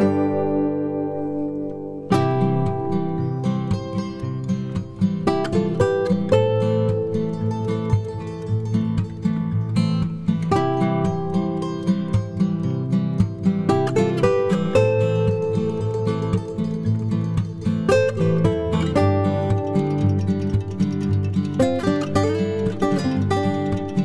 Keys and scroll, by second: 0.0 typing, 1.4 ctrl+-, 6.8 space, 8.3 ctrl+g, 12.3 space, 13.4 ctrl+d, 16.8 Page_Down, 22.6 space, 23.1 ctrl+d.